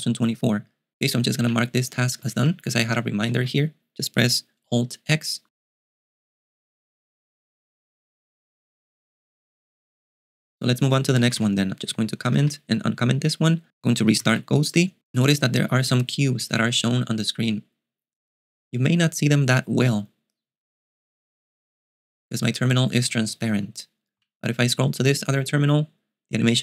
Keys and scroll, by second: 2.0-2.9 typing, 3.4 alt+x, 10.9-12.7 typing, 14.5 super+q.